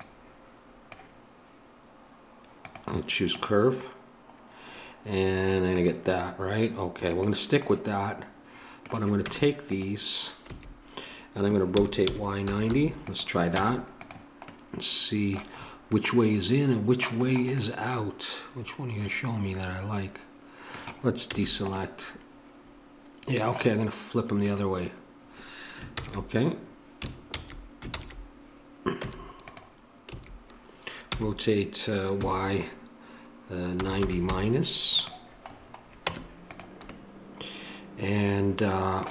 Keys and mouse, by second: 8.7-9.8 middle drag, 9.2 Tab, 10.4 a, 11.7 r, 13.6 Tab, 18.6-20.0 middle drag, 21.2 a, 21.8-23.4 middle drag, 24.4-25.9 drag, 25.9 ctrl+z, 27.9 ctrl+z, 28.9 Tab, 30.1 a, 31.0 r, 36.0 Tab, 37.4-39.1 middle drag.